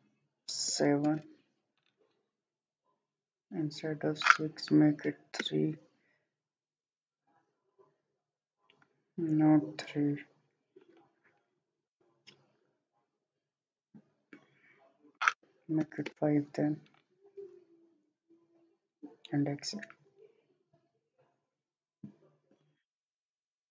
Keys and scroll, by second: 0.7 7, 1.1 Return, 5.1 3, 5.5 Return, 12.7 typing, 15.8 5, 16.1 Return, 19.0 typing.